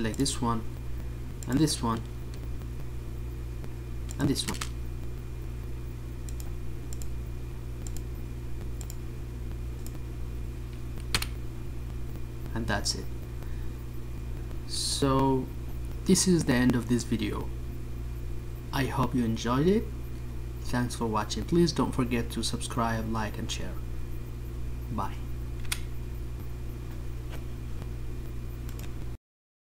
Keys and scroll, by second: 9.6 ctrl+z.